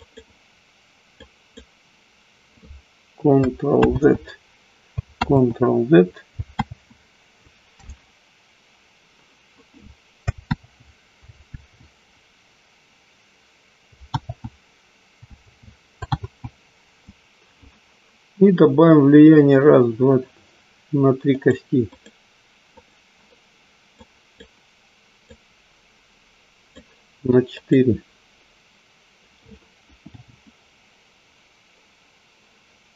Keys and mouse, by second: 0.7 click, 1.2 click, 3.9 ctrl+z, 5.2 ctrl+z, 10.6 ctrl+z, 11.6 ctrl+z, 14.2 ctrl+z, 15.3 ctrl+z, 16.2 ctrl+z, 21.5 click, 21.9 click, 22.7 click, 24.0 click, 25.2-27.5 drag, 27.6 click, 30.0 g.